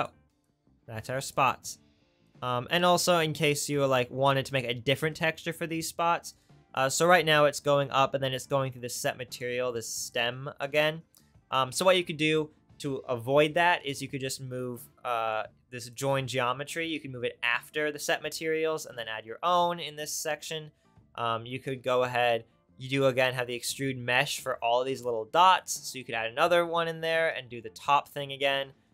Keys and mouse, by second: 0.1 click, 4.6-7.4 middle drag.